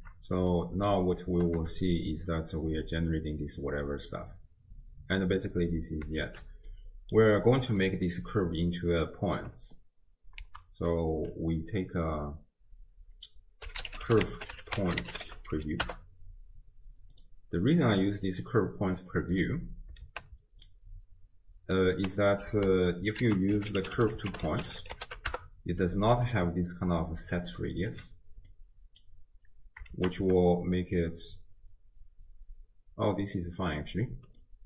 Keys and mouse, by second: 0.5 click, 1.3 shift+space, 6.2 shift+space, 6.7 click, 7.8 click, 10.4 ctrl+a, 19.4 click, 20.1 shift+space, 22.0 space, 23.2 ctrl+a, 27.5 click, 28.0 m, 28.5 click, 30.0 shift+space, 34.1 space, 34.4 click.